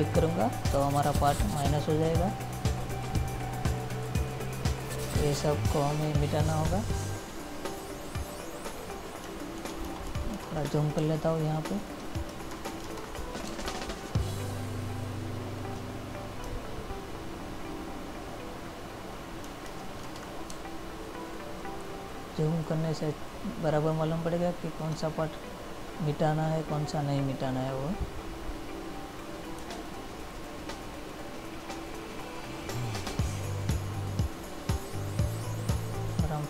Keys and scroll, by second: 11.1 space, 13.6 space, 20.7 space, 33.7 ctrl+-.